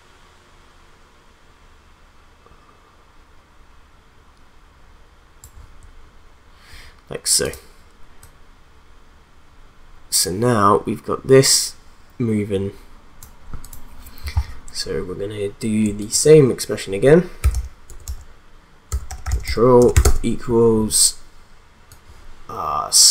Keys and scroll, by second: 17.4-20.4 typing.